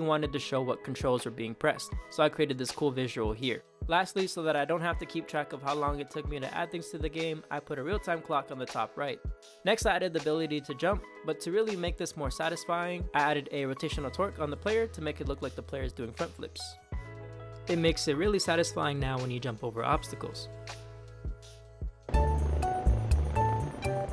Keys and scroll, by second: 0.3 Left, 0.8 Right, 1.2 Down, 1.7 Up, 4.1 Right, 5.2 Left, 5.8 d, 7.3 a, 8.8-10.6 typing, 12.1 space, 15.4 space, 16.9 space, 18.0 Up, 18.7 Right, 19.2 Left, 19.5 Right, 20.0 space, 21.4 space, 22.5-23.7 typing.